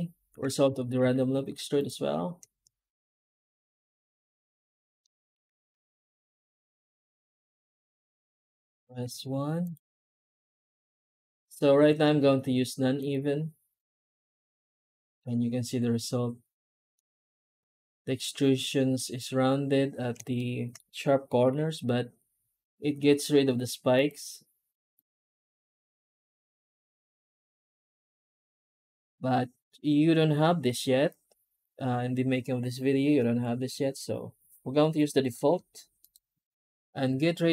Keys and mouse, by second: 4.9 middle drag, 5.8-6.4 middle drag, 6.6 middle drag, 6.8 middle click, 7.2 F9, 16.8-20.0 middle drag, 20.2-20.6 shift+middle drag, 21.3 F9.